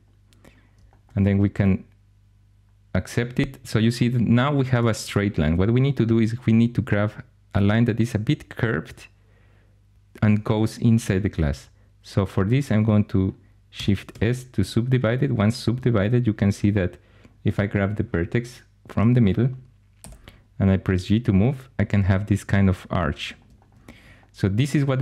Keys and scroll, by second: 14.0 shift+s, 15.9 1, 19.9 g.